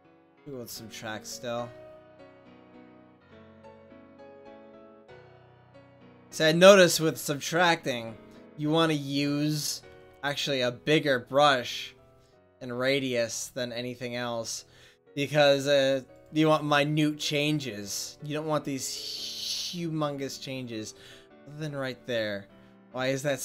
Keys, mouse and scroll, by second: 3.9-8.0 drag, 8.0-9.9 middle drag, 10.1 f, 14.5-16.8 drag, 17.6 middle click.